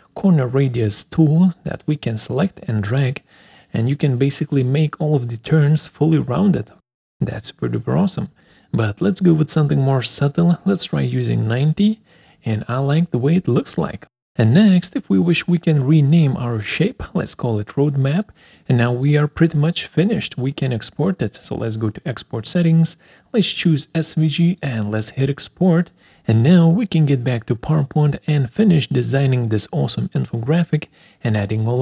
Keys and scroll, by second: 11.9 Return, 16.2-17.6 typing, 31.4 alt+Tab.